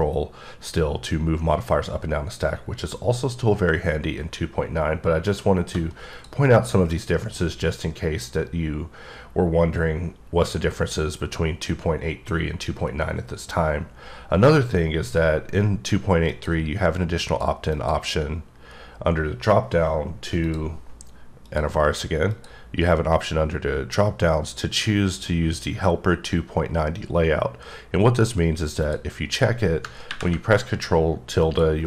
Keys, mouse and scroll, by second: 0.0 scroll up 2, 0.4 scroll down 2, 0.4-0.8 scroll up 3, 0.8 shift+scroll down 3, 1.2 scroll up 2, 1.5 scroll down 2, 1.8-2.8 scroll up 5, 2.9-3.5 scroll down 5, 3.5-4.1 shift+scroll up 1, 4.1-5.0 shift+scroll down 1, 5.0-5.9 shift+scroll down 1, 6.2 click, 16.3 click, 17.2 click, 17.8 click, 20.5 click, 21.5 click, 22.4 click, 28.9 click, 31.5 click.